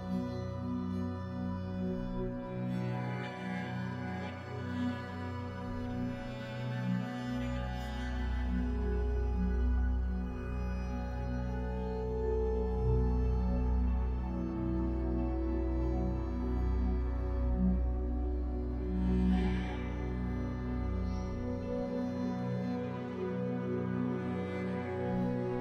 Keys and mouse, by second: 0.1 shift+middle click, 1.0 g, 1.8 middle click, 2.7 g, 4.6 middle click, 5.4 shift+middle click, 7.4 Tab, 8.2 click, 8.8 2, 9.7 3, 10.1 middle click, 10.4 shift+click, 10.6 middle click, 13.9 middle click, 16.1 middle click, 16.8 middle click, 17.3 middle click, 17.6 alt+shift+click, 18.6 middle click, 19.2 typing, 20.2 click, 20.8 Tab, 22.2 Tab, 22.4 Tab, 22.6 Tab, 23.7 ctrl+s, 24.0 Tab, 24.2 right click, 24.8 Tab.